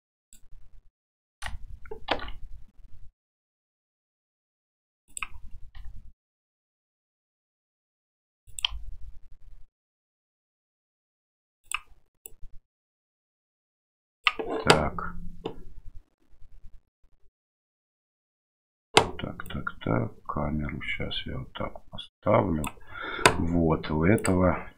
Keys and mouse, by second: 2.1 shift+d, 5.7 r, 8.7 g, 12.2-14.2 drag, 19.5-22.7 drag, 24.2 click.